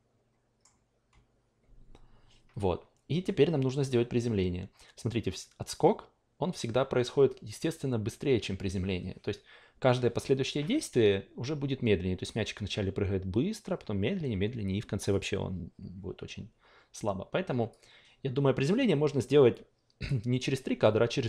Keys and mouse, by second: 3.7-15.1 drag, 17.7-20.1 drag.